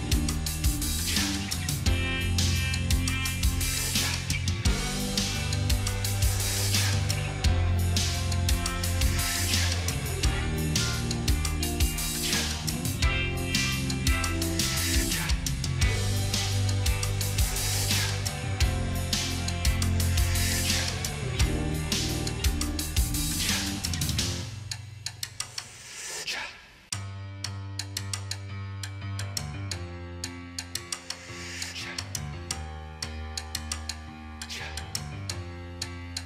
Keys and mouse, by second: 0.9 ctrl+a, 2.9 ctrl+d, 9.8 ctrl+j, 23.5 ctrl+j, 24.8 ctrl+click, 27.5 ctrl+z, 32.0 ctrl+j, 36.0 ctrl+j.